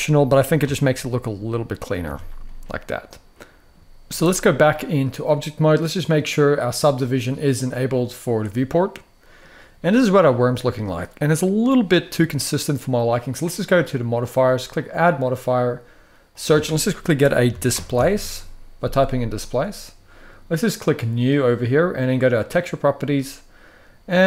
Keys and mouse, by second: 0.3 x, 1.6 click, 1.8 Tab, 2.1-3.4 middle drag, 8.6-9.1 middle drag, 9.5-9.9 middle drag, 10.5-11.0 middle drag, 11.3-11.7 middle drag, 14.6-19.4 drag, 20.9 click, 22.2-22.6 drag.